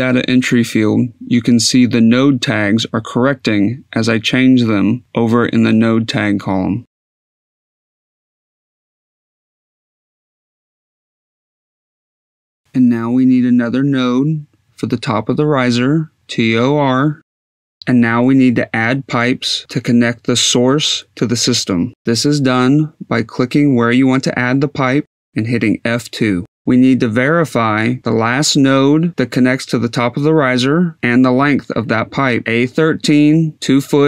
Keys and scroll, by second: 0.0-2.4 typing, 3.4-15.1 typing, 9.4 Down, 11.3 Down, 15.3 F2, 17.0 t, 17.4 r, 23.8 F2, 24.7 F2.